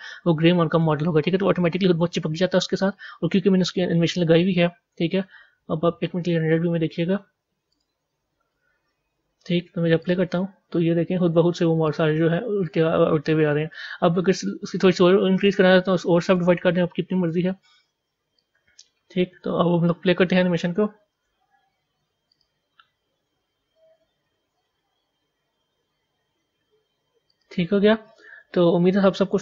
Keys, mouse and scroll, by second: 7.8 z, 10.0-14.6 drag, 14.6 b, 16.3 right click, 17.1 Tab, 18.3-21.1 drag, 21.1 a, 22.3 click, 27.3-29.4 drag.